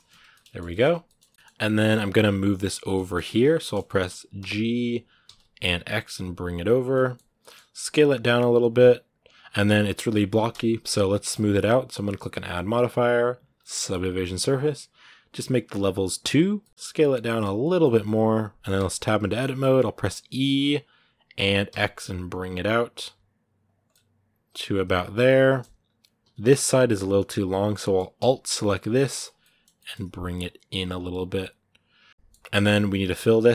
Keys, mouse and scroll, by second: 0.1-1.7 middle drag, 1.7 scroll up 1, 2.6 shift+middle click, 2.9 scroll up 2, 3.4 shift+middle click, 4.2 g, 6.7 middle click, 7.0 scroll down 2, 7.2 middle click, 7.5 s, 9.2 scroll up 2, 13.7-16.4 drag, 16.4 middle click, 16.7 s, 17.6 middle click, 18.5 Tab, 19.0 middle click, 19.9 e, 23.7-25.1 middle drag, 25.1 scroll up 1, 25.2-28.5 middle drag, 28.5 alt+right click, 29.2 middle click, 29.5 g, 31.2-33.5 middle drag.